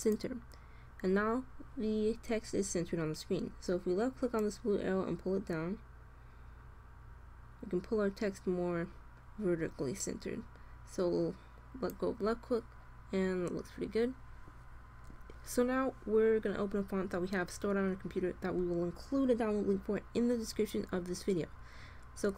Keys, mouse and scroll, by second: 4.2-6.0 drag, 22.3 click.